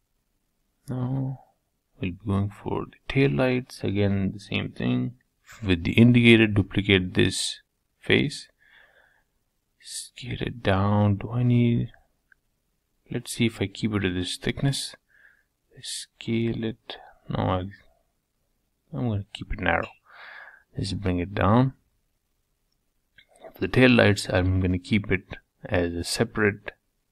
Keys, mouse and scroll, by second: 1.5 Tab, 2.2 click, 2.8 middle click, 3.6-4.0 scroll up 3, 4.0 shift+middle click, 4.4 scroll down 1, 4.7 middle click, 5.6 shift+d, 9.4 g, 13.4 s, 15.2 s, 18.5 g, 20.6 g, 23.6-27.1 middle drag.